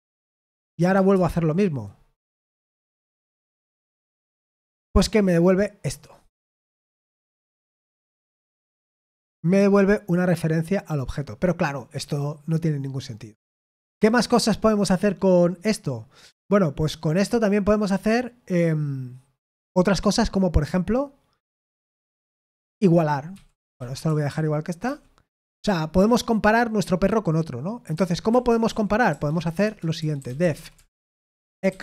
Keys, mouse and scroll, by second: 0.6-1.4 typing, 3.6 F5, 13.9 Escape, 23.0-24.8 typing, 25.2 Escape, 27.6-31.8 typing, 29.6 Return.